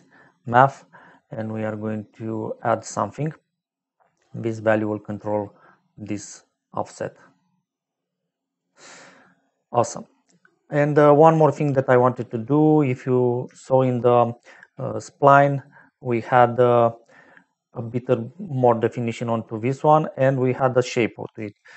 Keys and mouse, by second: 3.9 shift+click, 10.8 middle click, 11.8 middle click, 13.5 shift+middle click, 15.2 middle click, 16.6 middle click, 18.5 middle click, 20.2 click, 21.5 shift+a.